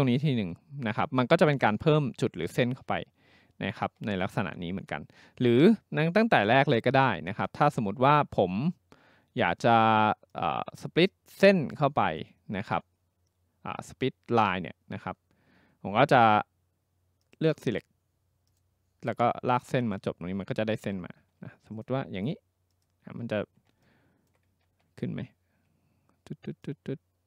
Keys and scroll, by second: 3.9 ctrl+z, 20.8 ctrl+z, 24.7 ctrl+z, 25.1 ctrl+z.